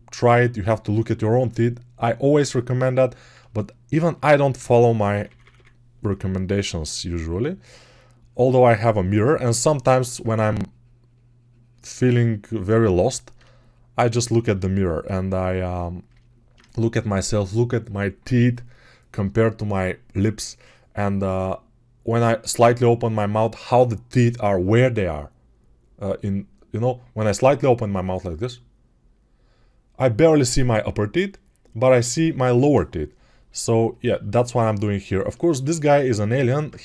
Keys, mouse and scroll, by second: 5.0 [, 5.1 [, 5.4 [, 36.7 1.